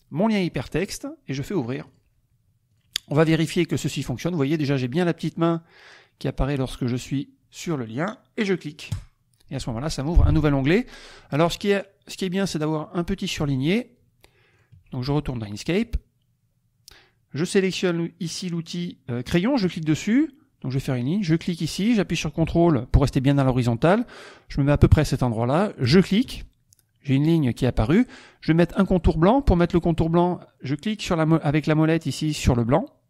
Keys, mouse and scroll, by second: 0.8 click, 1.8 click, 2.7 click, 8.9 click, 11.1 click, 13.4 alt+Tab, 14.6 alt+click, 19.6 click, 21.3 click, 25.9 ctrl+click.